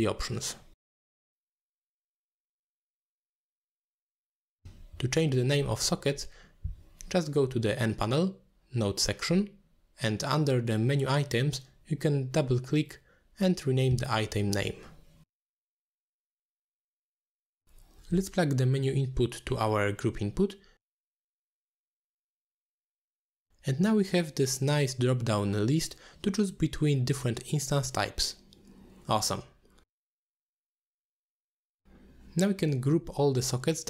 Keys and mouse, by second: 2.6 middle click, 3.1 click, 4.0 click, 4.2-4.6 drag, 4.8-5.2 drag, 5.6 click, 6.3 n, 8.4 click, 8.7-11.5 drag, 12.8 click, 12.9-14.8 drag, 16.1 click, 16.3-17.7 drag, 18.9 click, 19.4 n, 20.3-21.0 drag, 21.2 middle click, 21.8 middle click, 22.0 click, 22.2 shift+f, 22.5 shift+d, 23.2 middle click, 23.4 ctrl+h, 23.7 middle click, 24.1-25.2 drag, 25.8 click, 26.6 ctrl+h, 27.5 click, 28.2 click, 29.8-30.4 drag, 30.9-31.5 drag, 32.0-32.5 drag, 33.1 n.